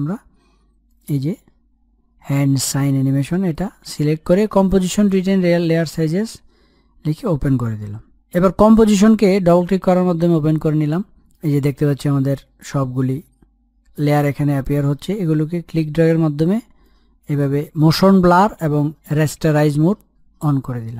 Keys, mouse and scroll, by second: 3.5 click, 8.6 click, 10.5-10.9 scroll down 1, 10.9 scroll up 1, 11.6-13.4 scroll down 1, 15.2-20.0 drag.